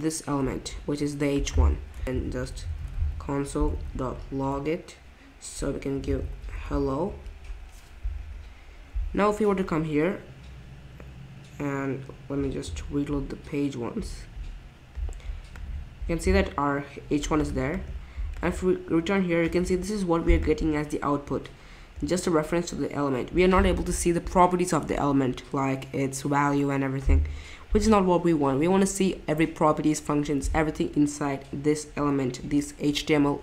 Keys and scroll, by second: 2.0-7.0 typing, 7.0 Escape, 9.5 typing, 12.6 super+r.